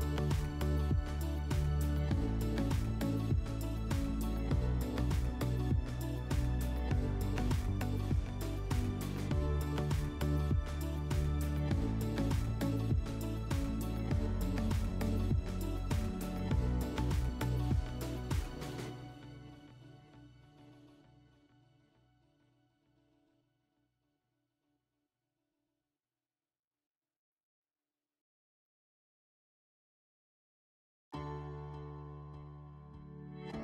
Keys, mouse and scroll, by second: 6.3 click, 9.8 click, 12.3 click, 13.9 middle click, 15.5 click, 15.8 scroll, 17.3 click, 18.7-19.1 scroll, 19.6 middle click, 20.4-20.9 scroll, 20.9 click, 22.7 click, 24.6 scroll, 26.5 scroll, 33.3 click.